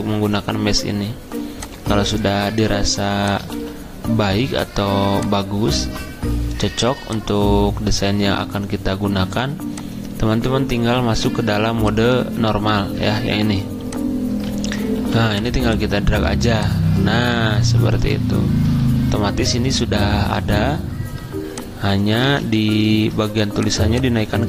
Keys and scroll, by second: 3.5 g, 15.0 v, 22.3 ctrl+z, 22.5 ctrl+z.